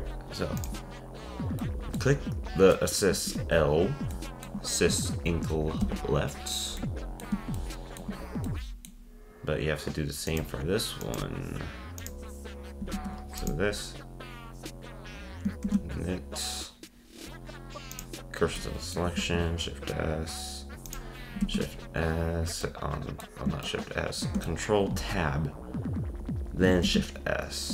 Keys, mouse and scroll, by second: 0.6 click, 1.6 scroll up 1, 1.6-3.4 middle drag, 3.4 scroll down 1, 4.1-5.8 shift+middle drag, 5.8 ctrl+Tab, 6.8-10.3 middle drag, 10.3 click, 11.0 click, 12.0 click, 12.9 ctrl+Tab, 13.4-14.8 drag, 15.6 shift+s, 18.6-19.2 middle drag, 19.2 ctrl+Tab, 20.8 click, 21.4 ctrl+Tab, 22.6-26.7 middle drag, 26.8 shift+s.